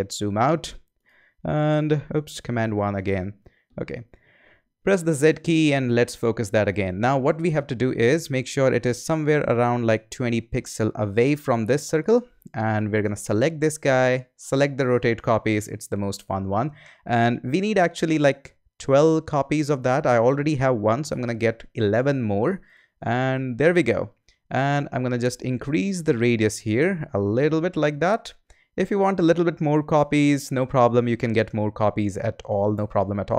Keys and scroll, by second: 1.7 super+2, 2.1 super+1, 4.9 z, 21.0 i.